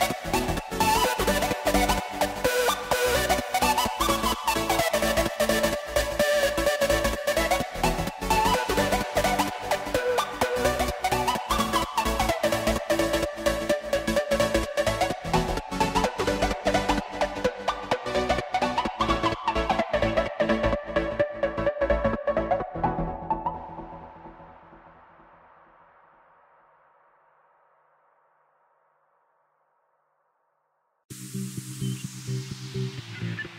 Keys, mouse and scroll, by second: 2.7 click, 3.7 z, 6.0 scroll down 3, 6.2-7.9 middle drag, 7.9 drag, 8.3 shift+drag, 8.7 shift+click, 9.5 KP_3, 11.1 s, 15.4 click, 22.5 click, 23.8-30.5 drag, 30.5-31.5 middle drag, 31.5 click, 33.3 i.